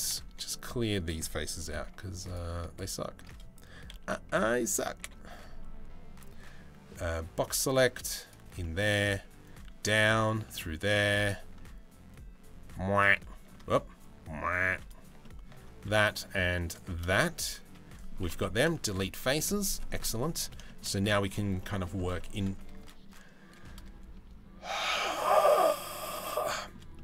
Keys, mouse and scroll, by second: 1.8 alt+click, 3.5 KP_3, 4.0 KP_1, 4.6 KP_3, 6.8 b, 8.2 middle click, 8.7 b, 10.0 middle click, 12.8 b, 13.4 b, 14.8 shift+middle click, 15.5 b, 16.6-17.7 middle drag, 18.2 Delete, 19.0 z, 19.5 middle click, 20.3 shift+middle click, 21.2 middle click, 26.1 middle click, 26.5 shift+middle click, 26.9 middle click.